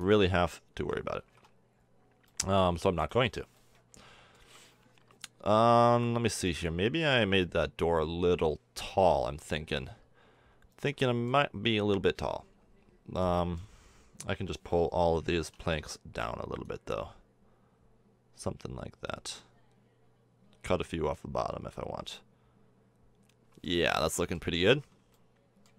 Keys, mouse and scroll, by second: 0.7 f, 1.2 a, 1.3 Tab, 2.0-3.1 middle drag, 4.4 KP_1, 9.2 Tab, 15.7 Tab, 21.9-23.3 middle drag, 24.4 KP_4, 25.6 KP_1.